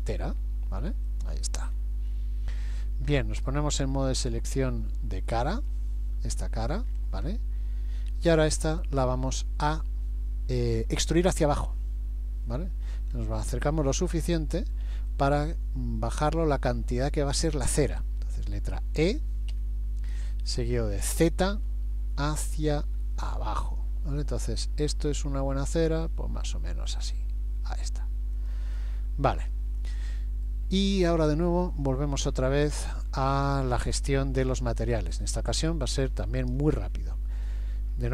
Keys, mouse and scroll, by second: 1.7-2.4 scroll up 6, 4.3 click, 5.5 click, 6.9-7.4 scroll up 6, 8.2 shift+middle click, 12.5-13.3 scroll up 3, 14.1 shift+middle click, 15.1 middle click, 19.5 e, 28.9-29.3 scroll down 4, 29.5 middle click, 32.8 middle click, 33.8-34.5 scroll up 1.